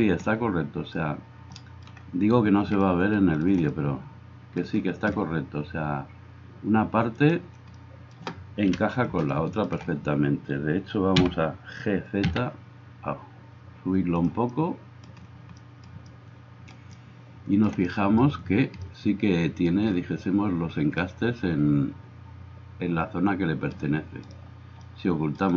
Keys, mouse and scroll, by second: 7.2 click, 7.8-9.1 middle drag, 8.7 KP_1, 9.7-25.5 middle drag, 11.2 g.